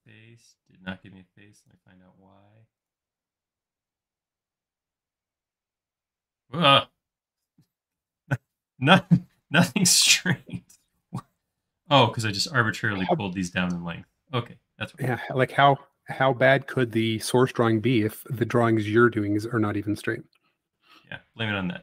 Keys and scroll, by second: 3.4 space, 13.7 typing, 15.1 typing, 16.9 typing, 19.2 l.